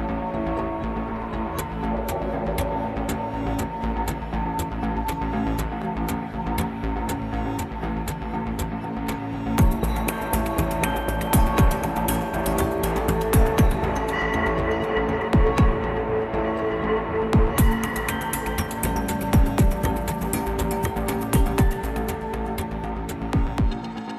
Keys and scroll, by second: 1.3 ctrl++, 2.0 ctrl+-, 2.5 ctrl+s, 3.5 Delete, 7.0 Delete, 8.7 ctrl+a, 16.7 ctrl+c, 16.8 ctrl+v, 17.3 Delete, 17.3 ctrl+z, 19.3 ctrl+s, 19.7 ctrl+z, 19.7 Delete, 22.5 ctrl+s, 23.0 ctrl+-, 23.2 ctrl++.